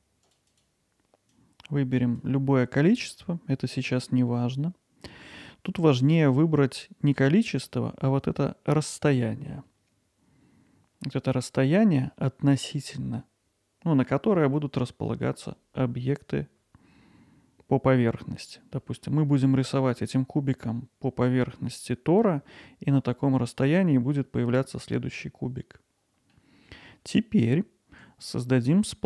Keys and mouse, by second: 0.5 click, 1.4 click, 7.6-12.1 drag, 18.7 middle drag, 26.3-26.9 middle drag, 27.5 alt+middle click, 28.3-28.7 middle drag.